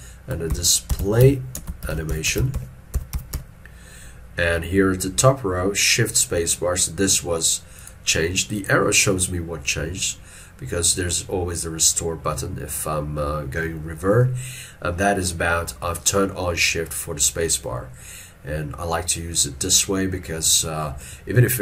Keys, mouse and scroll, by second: 0.6 shift+p, 1.7 space, 1.9 shift+a, 2.0 n.